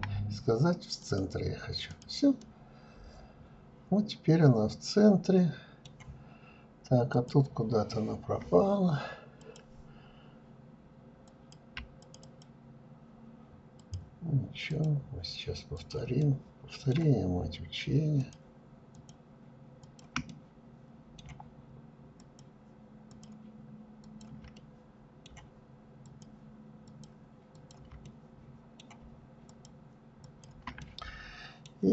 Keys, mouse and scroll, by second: 0.7 click, 1.2-4.2 middle drag, 6.0 click, 8.2-10.4 drag, 10.8 shift+click, 11.0 shift+click, 12.6 shift+click, 13.5 shift+click, 14.6 shift+click, 15.0-17.0 middle drag, 17.0 shift+click, 17.8 shift+click, 18.7 shift+click, 19.1-21.0 middle drag, 21.0 shift+click, 21.9 shift+click, 22.9 shift+click, 23.4-24.9 middle drag, 24.9 shift+click, 25.7 shift+click, 26.4 shift+click, 26.9-28.3 middle drag, 28.3 shift+click, 29.1 shift+click, 29.6-31.9 middle drag.